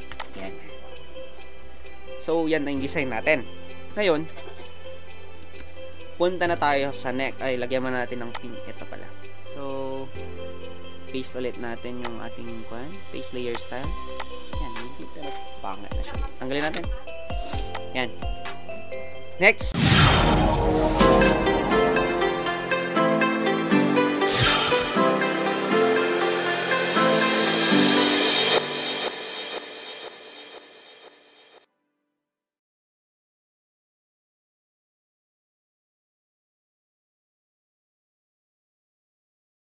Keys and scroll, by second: 16.6 ctrl+alt+z.